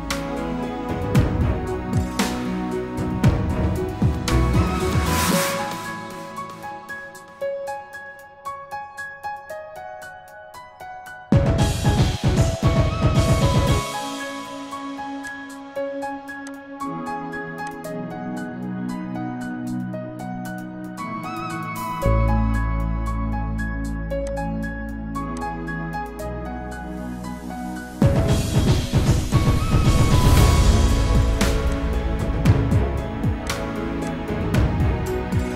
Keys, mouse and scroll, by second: 0.4-1.1 typing, 3.2-3.9 typing, 13.0 typing, 18.3 typing, 18.7 Return, 29.2 alt+click, 33.4 alt+click.